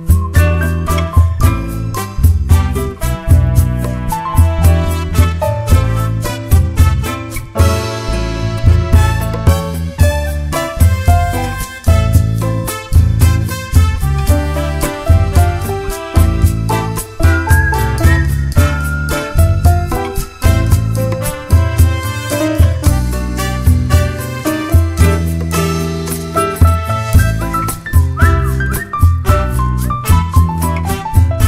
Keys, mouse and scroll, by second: 0.4 1, 0.6 click, 1.1 g, 1.9 click, 2.1 shift+click, 2.3 d, 2.6 scroll down 1, 2.7 `, 3.7 scroll up 1, 3.9 `, 4.9-5.3 scroll down 1, 5.3 scroll up 1, 6.3 click, 6.5 scroll down 1, 6.7 `, 7.0 scroll up 1, 7.7-8.3 scroll up 1, 9.3 ctrl+r, 11.4 click, 11.6 scroll down 2, 12.3 `, 13.3-13.8 scroll down 2, 13.9 scroll up 2, 14.1 `, 15.4 `, 15.9 scroll up 2, 16.1 Tab, 16.7 ctrl+r, 18.1-19.1 scroll down 2, 25.2 ctrl+z, 25.5-26.0 scroll up 1, 26.2 `, 26.9 scroll up 1, 27.0 `, 27.4 alt+a, 29.7 scroll down 1, 30.1 `, 30.3 scroll up 1, 31.1 k.